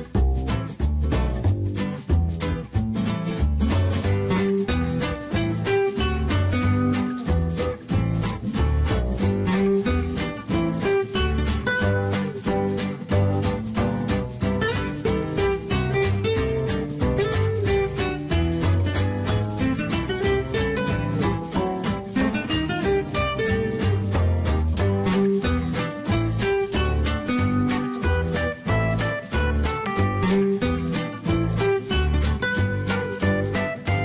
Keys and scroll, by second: 14.8 Escape, 18.9 Escape, 27.2 3, 27.5 Return, 29.8 3, 30.2 Return.